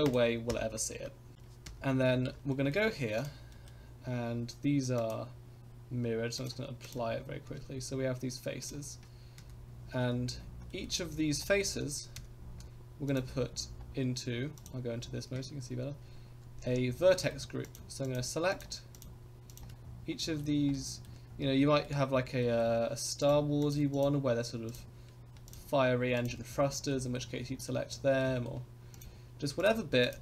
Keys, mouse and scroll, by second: 0.0 click, 0.5 KP_0, 1.6 KP_0, 2.1 scroll up 2, 2.5 shift+middle drag, 3.1 click, 3.5 middle drag, 5.2 click, 6.3-7.1 drag, 7.7 Tab, 8.6 click, 10.1-10.4 scroll down 3, 10.7 middle click, 10.9-11.4 scroll down 3, 11.4 shift+middle click, 12.3 3, 13.0 click, 13.5 scroll down 3, 14.6 click, 15.0 scroll up 1, 16.3 c, 16.8 scroll up 2, 17.1 shift+click, 17.1 shift+middle click, 17.6 shift+click, 18.0 shift+click, 18.5 shift+click, 18.9 shift+click, 19.5 shift+click, 19.8 scroll down 2, 20.2 middle click, 20.4 scroll down 2, 20.7 shift+middle click, 21.2 scroll up 2, 21.6 shift+middle click, 22.1-22.4 scroll up 2, 22.4 shift+middle click, 23.2 shift+click, 23.6 shift+click, 23.9 shift+click, 24.7 shift+click, 25.4 shift+click, 26.1 shift+click, 26.4 scroll down 3, 26.9 shift+middle click, 27.3-27.9 scroll up 2, 27.6 middle click, 28.2 shift+middle click, 28.9 shift+click, 29.6 shift+click, 30.0 shift+click.